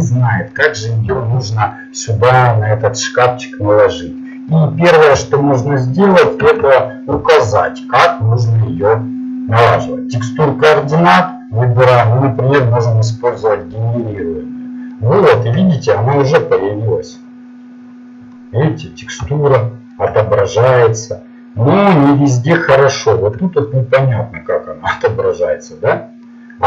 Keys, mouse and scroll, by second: 14.9-19.2 middle drag, 21.3-23.8 middle drag, 26.3 middle click.